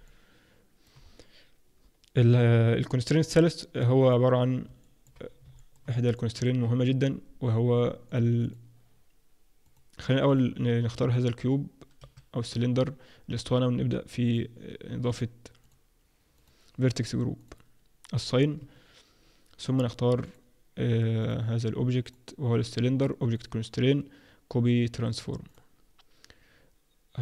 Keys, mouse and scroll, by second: 0.1 middle click, 0.9-1.8 scroll down 1, 1.8-2.5 scroll down 2, 3.7 click, 4.4 click, 4.8 middle click, 5.2 scroll down 3, 5.5 shift+middle click, 6.1 middle click, 8.1 click, 8.4 click, 10.3 click, 10.4 Tab, 12.0 3, 12.4 click, 14.3 click, 15.6 click, 16.3 click, 18.1 click, 18.5 Tab, 20.2 click, 21.5 click, 22.0 click, 23.3 click.